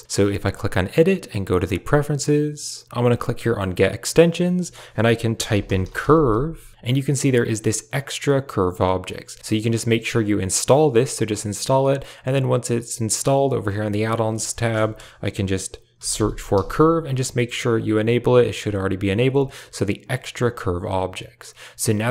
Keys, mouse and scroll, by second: 0.9 click.